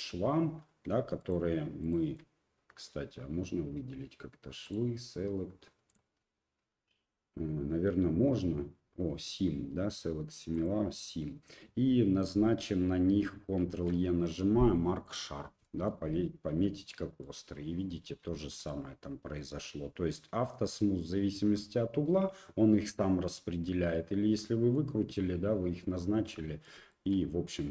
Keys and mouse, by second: 1.2 shift+click, 1.8 shift+click, 4.7 drag, 5.9-10.6 drag, 13.6 ctrl+e, 15.6 click, 16.5 Tab, 17.2 click, 18.4 shift+click, 18.6-19.4 drag, 24.4-24.8 middle drag, 26.3-26.7 middle drag, 26.9 shift+middle drag, 27.4-27.7 middle drag.